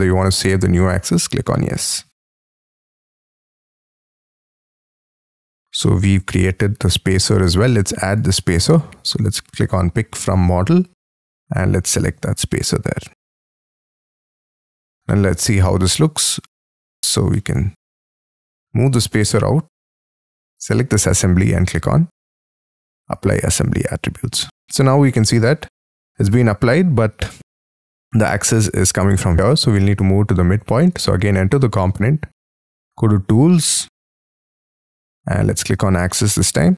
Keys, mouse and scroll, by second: 2.1 scroll down 5, 2.4 middle click, 2.9-3.4 scroll down 7, 3.1 space, 3.4 Escape, 3.7 Escape, 3.9-5.1 scroll down 37, 5.3 middle click, 5.8 middle click, 6.3-7.6 scroll up 36, 13.4 middle click, 13.9-15.2 scroll down 20, 14.8 space, 15.0 middle click, 15.6 middle click, 17.0 scroll up 6, 17.3 middle click, 17.8-18.7 scroll up 4, 18.7 m, 20.1 space, 24.4-25.1 scroll up 10, 25.1 middle click, 25.9 scroll up 4, 26.9-27.6 scroll down 14, 28.1-29.5 scroll up 5, 29.5 scroll down 7, 30.0-30.6 scroll up 4, 30.6 double click, 30.8 double click, 36.1 middle click.